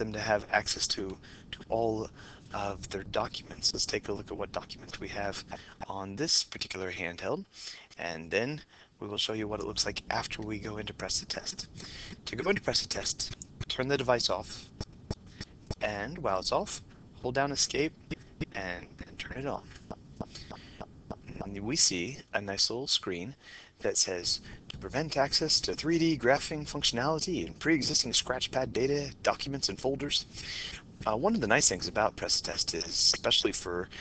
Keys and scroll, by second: 15.7 Home, 18.4 Home.